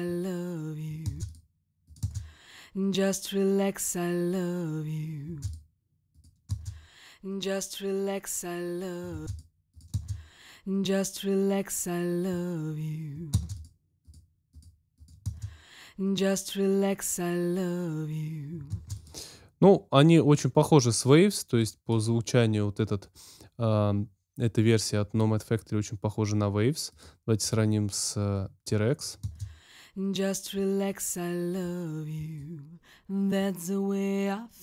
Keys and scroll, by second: 1.0 space, 5.2 space, 6.5 space, 9.1 space, 13.3 space, 15.2 space, 18.7 space, 29.1 space.